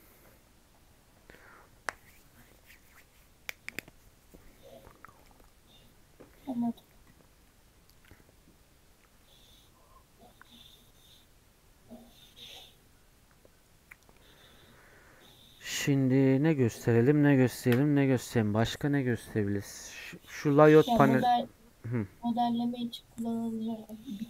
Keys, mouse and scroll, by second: 19.0 click, 19.5 click, 19.9-24.2 drag.